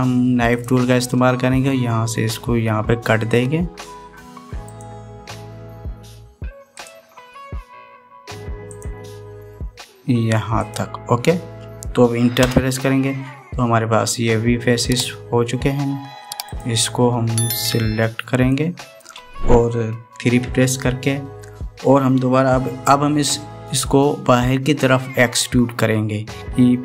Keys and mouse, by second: 1.3 click, 5.4-13.2 drag, 17.2 click, 18.3-19.4 drag, 21.2 KP_3, 26.4 ctrl+z.